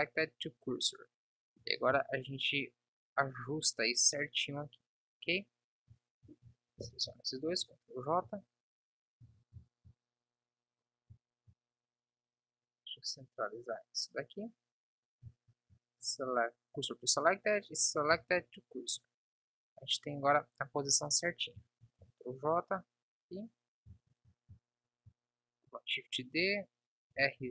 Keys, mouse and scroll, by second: 1.9 KP_3, 2.3 z, 7.1 ctrl+j, 8.1 KP_1, 8.6 z, 9.5 z, 15.7 shift+s, 22.1 shift+d, 27.4 r.